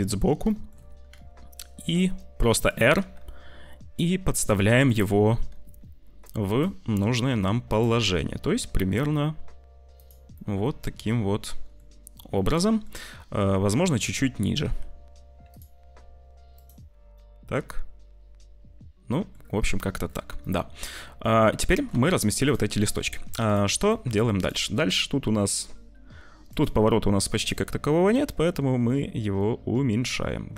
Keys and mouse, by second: 0.5 shift+middle click, 1.0 r, 3.1 g, 5.2 g, 6.7 r, 8.5 g, 10.2-11.7 middle drag, 12.4 middle click, 13.6 `, 14.7 g, 15.9 r, 17.2-19.2 middle drag, 19.7 middle click, 20.3-21.8 middle drag, 22.0 shift+middle click, 22.8 ctrl+s, 23.8 middle click, 24.3 click, 26.4 click, 28.2-30.5 drag.